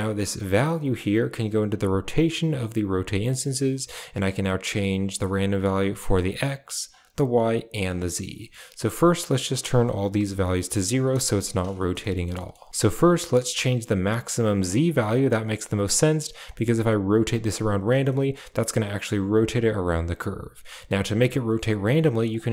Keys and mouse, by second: 0.8-2.0 drag, 2.3 click, 3.2 middle drag, 4.1-5.9 drag, 6.2 click, 7.1 click, 8.2 middle click, 9.4 click, 10.7 click, 12.3 middle click, 13.0 middle click, 14.5-16.2 drag, 16.5 middle click, 17.2 click, 18.1 middle click, 19.0 middle click, 22.1-22.5 drag.